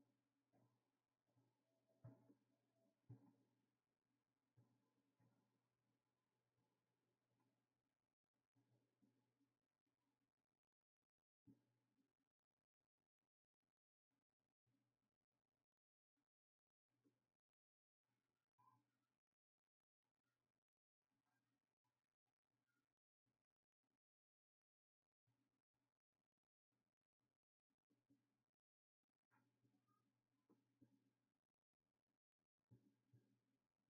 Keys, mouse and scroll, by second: 11.1-16.0 drag, 17.9-33.8 drag.